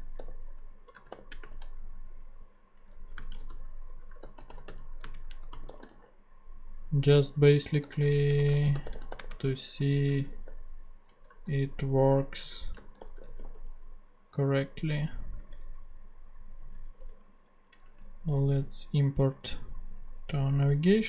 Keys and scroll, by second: 0.0-1.9 typing, 2.8 Up, 2.9 Left, 3.1-6.4 typing, 8.1-11.2 typing, 12.5-14.0 typing, 16.4 ctrl+Tab, 17.0 alt+Return, 17.7 alt+Down, 20.3 Return.